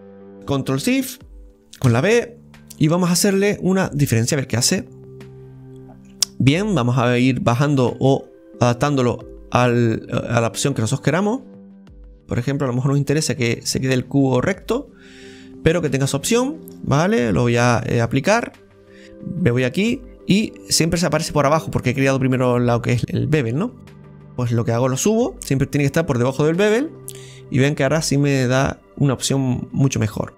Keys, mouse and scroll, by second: 0.3 shift+right click, 4.1 ctrl+shift+b, 4.6-6.2 middle drag, 6.2-6.6 scroll up 3, 6.6-8.3 middle drag, 8.3-9.7 drag, 9.7 right click, 10.9-13.9 drag, 16.1 scroll down 1, 16.8-19.0 shift+right drag, 16.8 scroll down 3, 19.3-19.9 scroll down 3, 19.9-22.9 scroll down 7, 23.0-23.6 scroll up 6, 24.3-25.2 scroll down 11, 25.2 click, 26.2-26.5 scroll up 2, 27.1-29.5 scroll up 6, 29.5-30.3 scroll down 5, 30.0 middle click.